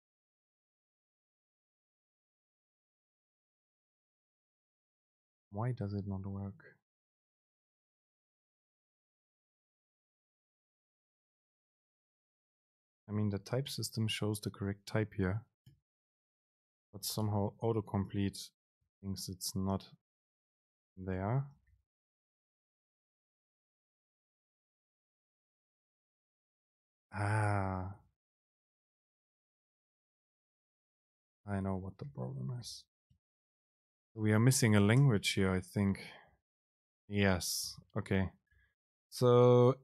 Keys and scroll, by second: 0.3 Up, 1.1 Up, 1.1 Down, 1.3 End, 1.6 BackSpace, 4.6 super+space, 13.6 ctrl+shift+super+t, 17.5 Return, 17.8 super+space, 28.7 super+l, 35.2 super+space, 37.8 BackSpace, 38.6 Return, 39.1 super+l.